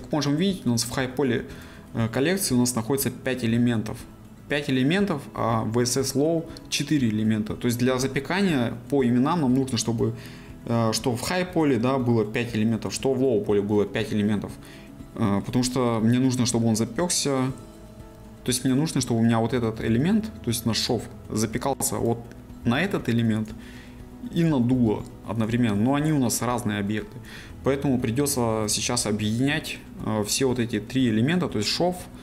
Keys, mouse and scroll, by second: 14.9-18.8 middle drag, 21.1 right click, 22.7 g, 23.4 right click, 24.7 g, 25.4 right click.